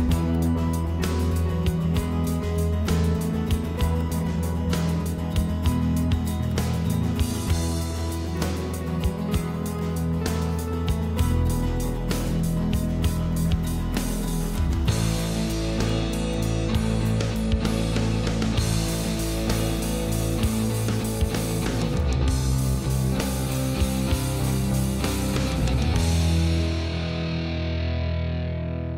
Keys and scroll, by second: 22.7 ctrl+0.